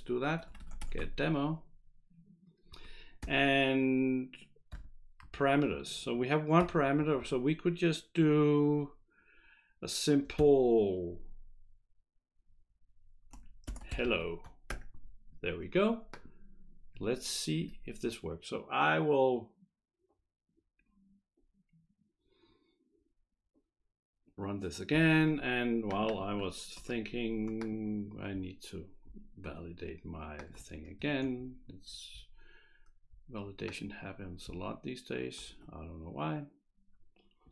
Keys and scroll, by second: 0.1-1.5 typing, 2.7 Right, 3.2 Right, 3.2 ,, 5.2 Right, 5.2 [, 5.2 ], 5.4 Right, 6.8 Left, 6.8 ;, 7.0 Left, 7.2 Left, 13.4-15.2 typing, 17.6 F5, 26.8 ctrl+c.